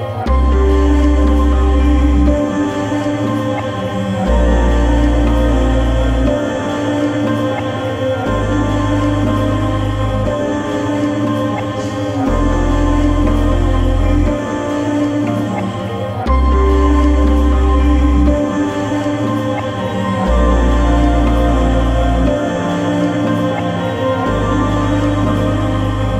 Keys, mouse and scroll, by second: 0.6 click, 5.2-6.5 scroll up 1, 6.5 click, 7.0 scroll down 1, 8.1 click, 9.2 Escape, 10.0 click, 10.9-11.2 scroll up 1, 11.2 Escape, 11.4 click, 12.0 x, 12.7 Escape, 13.7 middle click, 14.6 click, 19.6 click.